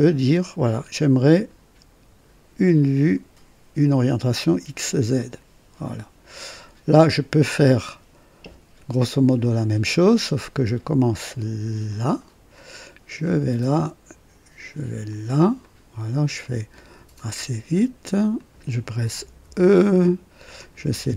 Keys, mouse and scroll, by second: 5.1 click, 5.8 click, 7.6-8.5 right drag, 9.3 click, 11.8 click, 13.2 click, 15.0 click, 15.6 right click, 16.4 right click, 17.1 click, 18.3 click, 19.6 typing, 20.5 click.